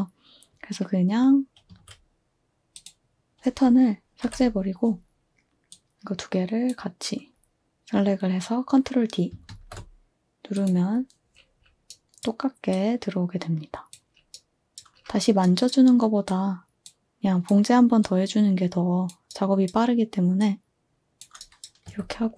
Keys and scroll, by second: 1.6 a, 4.2 Delete, 9.4 ctrl+d, 21.8 2.